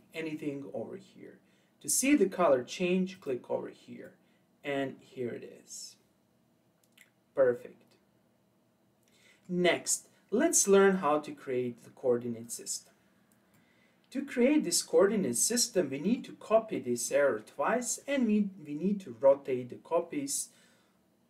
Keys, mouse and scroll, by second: 3.2 click, 4.0-7.0 middle drag, 12.4 click, 13.5-16.5 middle drag, 16.7-19.9 middle drag.